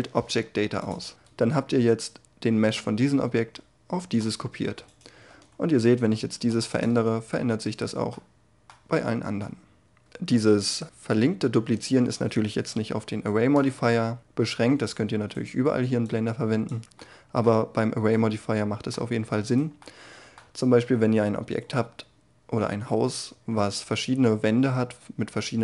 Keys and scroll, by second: 6.3 g, 6.8 Tab, 12.4 ctrl+z.